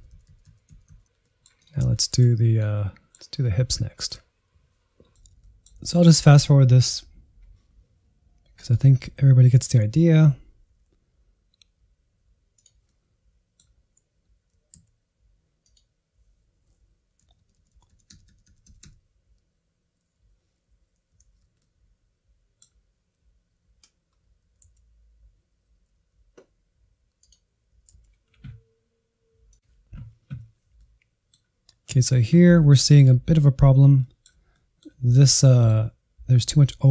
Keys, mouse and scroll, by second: 0.5 Right, 0.8 Right, 0.9 Right, 1.1 Right, 1.3 Right, 1.7 middle click, 1.9 click, 2.0-4.0 shift+middle drag, 4.8 middle click, 5.4 scroll down 3, 5.6 click, 5.7 scroll up 2, 5.9 r, 6.2 middle click, 6.4 r, 6.8 Right, 7.3 alt+r, 8.8 Right, 9.0 alt+r, 9.1 middle click, 10.0-13.8 typing, 10.3 Right, 10.6 click, 11.6 click, 12.2 click, 12.8 middle click, 14.2-14.6 Right, 14.8 click, 14.9 alt+r, 15.0 click, 15.1 alt+r, 15.6 click, 15.8 r, 16.4-17.6 Right, 16.8 a, 16.9 alt+g, 17.2 Right, 17.9 click, 18.1-20.6 typing, 18.6 click, 19.7 middle click, 19.9 click, 20.2 click, 20.8 Right, 21.2 alt+r, 21.4 click, 22.1-24.6 typing, 22.2 click, 22.7 click, 23.3 click, 23.6 click, 24.2 middle click, 24.7 Right, 25.2 alt+g, 25.4 shift+middle click, 25.5-25.9 scroll down 2, 25.9 Right, 26.3 g, 26.7 middle click, 27.0-27.4 scroll up 1, 27.4 r, 30.8-33.1 middle drag, 33.1-33.8 scroll up 1, 33.8 scroll up 3, 34.0-36.9 shift+middle drag.